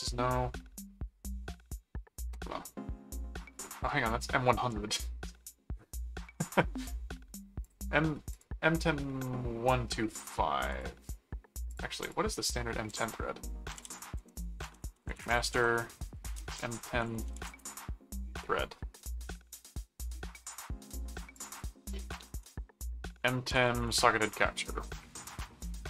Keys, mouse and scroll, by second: 3.7 click, 7.6 click, 8.3 click, 10.7 click, 11.7 click, 13.1-17.8 typing, 21.3 click, 22.3-24.1 typing.